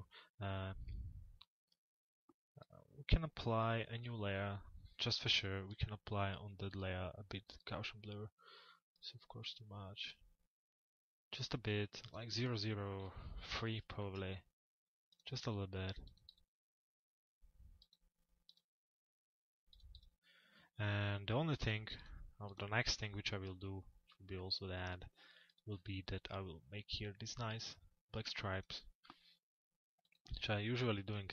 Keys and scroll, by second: 12.5 BackSpace.